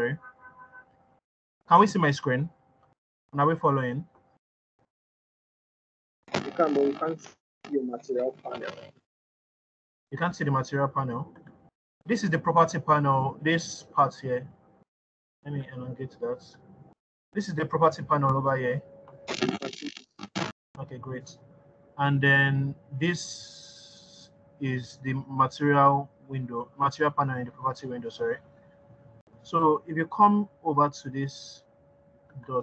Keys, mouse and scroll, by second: 3.4-5.7 scroll down 2, 17.0 click.